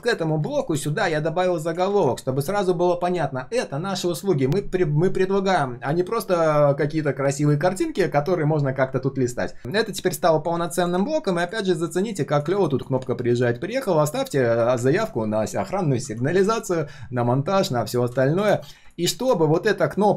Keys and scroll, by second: 1.8 ctrl+z.